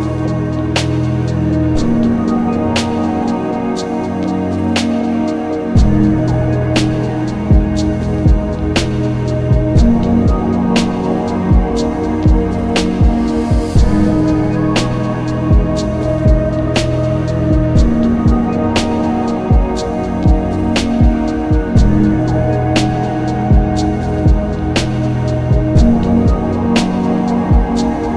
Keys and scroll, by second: 7.0 s, 8.8 ctrl+alt+z, 9.4 x, 10.8 typing, 19.0 ctrl+z, 21.5 z.